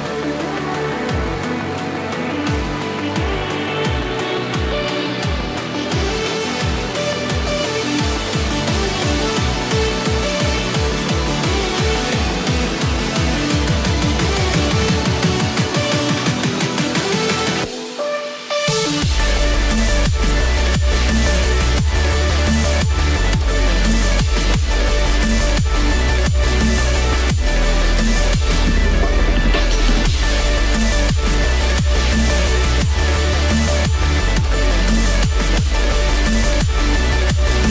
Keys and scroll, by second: 0.4 ctrl+space, 1.8 ctrl+-, 4.2 ctrl+0, 13.2 Return, 18.2 Return, 27.4 ctrl+=, 30.0 ctrl+-, 30.6 ctrl+0, 32.2 ctrl+=.